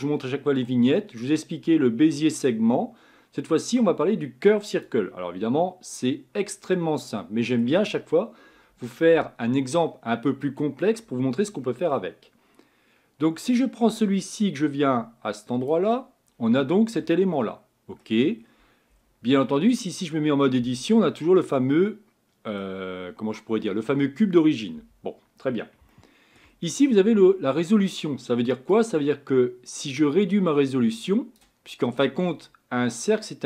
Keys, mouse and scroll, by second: 15.7 click, 16.3-17.0 scroll up 11, 17.3-18.4 middle drag, 18.4-19.4 scroll down 10, 19.4-20.6 middle drag, 20.6 Tab, 21.1-22.9 middle drag, 22.9-24.8 scroll up 5, 24.8 Tab, 25.9-29.3 shift+middle drag, 29.3-31.8 drag, 31.8-32.2 scroll up 4, 32.2 scroll down 2.